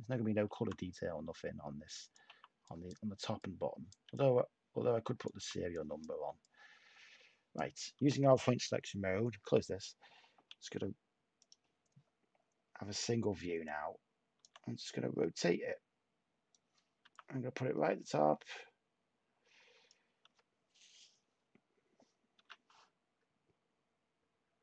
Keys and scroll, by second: 0.5 t, 2.2 t, 4.0 t, 10.3 y, 17.0 t, 22.3 h.